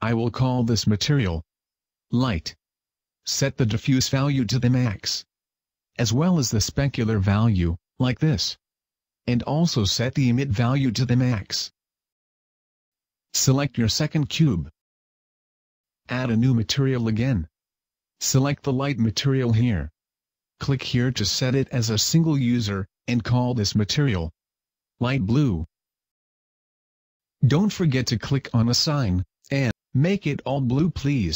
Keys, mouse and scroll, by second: 0.4 click, 5.5 click, 6.4 click, 7.1 click, 9.0 click, 9.5 click, 10.3 click, 14.0-14.5 scroll up 1, 14.5 Tab, 16.8 click, 17.8 click, 20.5 click, 21.2 click, 28.2 click, 29.6 click, 30.2 click.